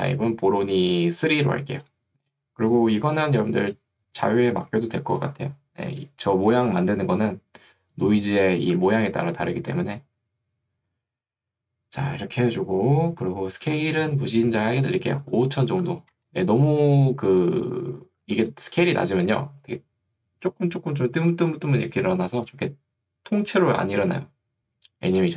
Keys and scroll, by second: 3.6 ctrl+2, 6.0 Escape, 8.8 ctrl+2, 10.2 Escape, 15.0 5, 16.2 Return, 18.4 ctrl+2, 19.4 Escape.